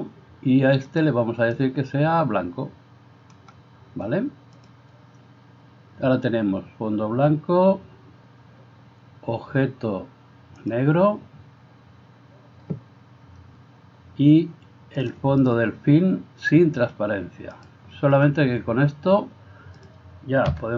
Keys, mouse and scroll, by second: 4.6 click, 10.6 click, 15.0 click, 17.6-19.9 drag, 20.7 F12.